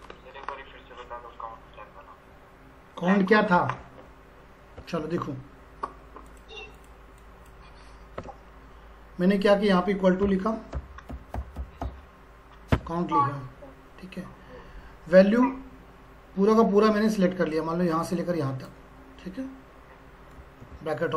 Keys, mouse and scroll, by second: 6.3-9.3 drag, 10.2-12.3 typing, 12.7 Tab, 17.0-17.4 scroll up 1, 17.5-20.6 drag, 20.6 shift+0.